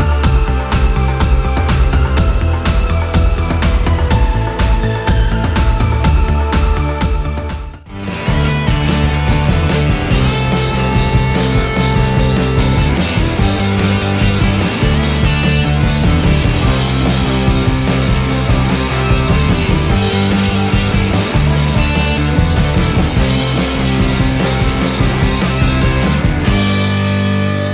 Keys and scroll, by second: 0.3 space, 2.4 space, 4.5 t, 5.8 space.